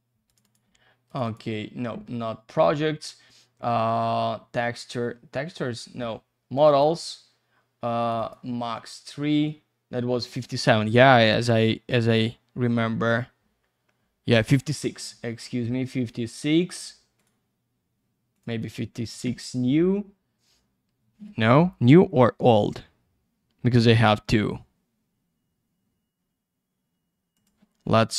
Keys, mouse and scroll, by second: 0.3 click, 0.4 click, 1.1 click, 1.2 click, 6.5 click, 6.7 click, 8.0 click, 8.2 click, 10.0-11.4 scroll down 1, 11.6 click, 17.2 click, 17.7-18.3 scroll down 1, 18.3 click, 18.5 click, 27.7 click.